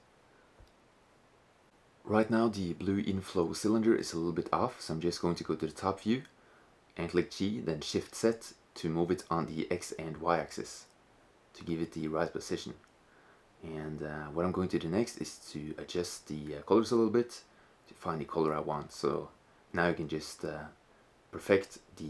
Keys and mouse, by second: 3.8 shift+z, 4.4 KP_7, 4.8 z, 4.9 z, 5.3 click, 6.3 click, 6.5 g, 9.5 middle click, 9.5 click, 9.6-9.9 middle drag, 10.0 middle click, 11.2 KP_0, 12.1 shift+z, 13.4 click, 16.4 right click, 16.6-17.1 drag.